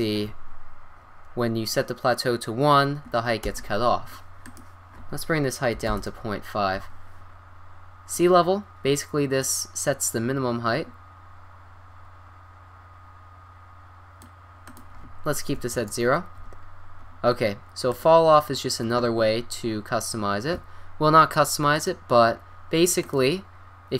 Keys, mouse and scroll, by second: 4.4-6.2 drag, 7.9 scroll down 1, 9.4-11.3 drag, 14.6-16.5 drag, 17.3 middle click, 17.9-19.3 drag, 21.7-22.1 drag.